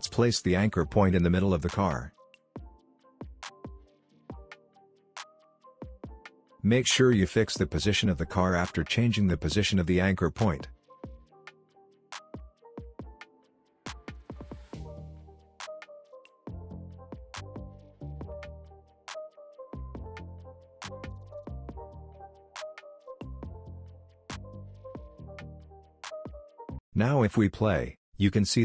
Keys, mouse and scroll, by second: 0.4-4.5 drag, 13.7-14.7 scroll down 1, 14.7-15.4 scroll up 1, 15.4-16.6 drag, 20.6 scroll down 1, 20.9 space, 21.0-21.9 click, 21.4 space, 22.1 scroll up 1, 22.1 space, 22.7 click, 23.0-23.3 space, 24.2-25.7 drag, 25.9-26.6 scroll down 1, 26.6 space, 26.7 click, 27.9 space.